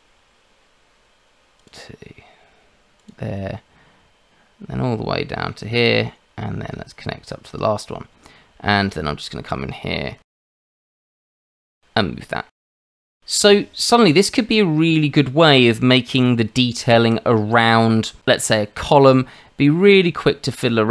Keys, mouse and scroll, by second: 1.6 click, 2.9 click, 7.5 click, 8.9 click, 10.9 click, 11.6 click, 16.6 Tab, 18.2-18.8 scroll down 2, 19.1-20.5 scroll up 1, 20.5 click.